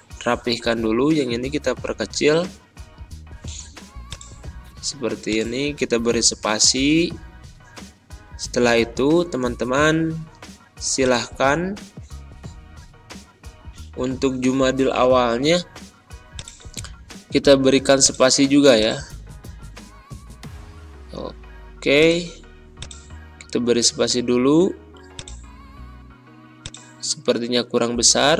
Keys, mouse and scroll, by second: 4.0 click, 8.7 BackSpace, 10.9 click, 12.0 Down, 14.0 Left, 16.3 click, 16.7 super+s, 17.9 click, 19.1 ctrl+a, 21.1-21.8 typing, 21.9-28.1 drag, 28.1 ctrl+].